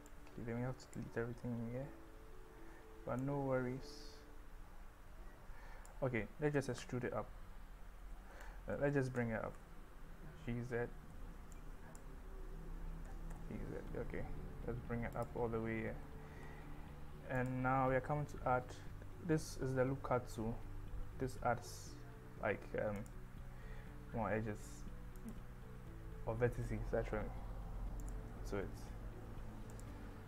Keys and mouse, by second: 0.1 click, 3.3-5.9 drag, 6.9 e, 8.1 Escape, 8.1 z, 9.2 g, 9.6 z, 11.1 Escape, 11.7 click, 13.1 g, 13.4 z, 23.2 click, 25.6 click, 28.4 click, 29.8 click.